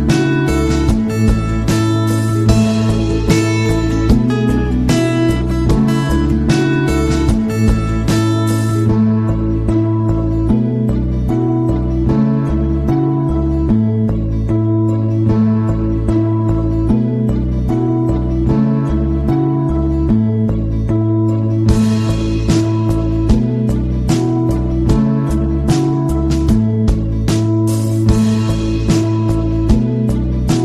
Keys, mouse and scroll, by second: 7.8 click, 14.6 click, 21.8-22.2 scroll down 2, 24.5-25.4 scroll up 4, 26.9 click.